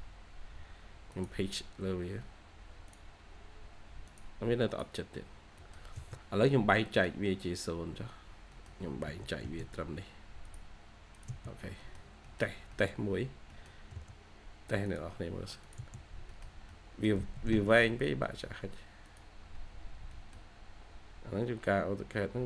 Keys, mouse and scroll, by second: 1.8-2.5 scroll up 2, 1.9-3.0 typing, 4.9 scroll down 1, 5.5 middle click, 5.9 space, 6.3-6.8 scroll up 1, 6.8 middle click, 7.2 scroll up 1, 8.4 middle click, 9.0 typing, 11.4 scroll down 1, 11.7 typing, 11.9 scroll down 1, 12.1 middle click, 13.1 scroll up 1, 13.4 middle click, 13.7 scroll down 1, 13.8 space, 13.9-15.0 scroll up 1, 15.7 space, 15.9 scroll down 1, 16.2 middle click, 16.7-17.1 scroll up 1, 19.8 scroll, 19.8 scroll down 1, 19.9 scroll up 1, 20.0 middle click, 20.6-21.3 scroll down 1, 21.3-22.4 scroll up 1.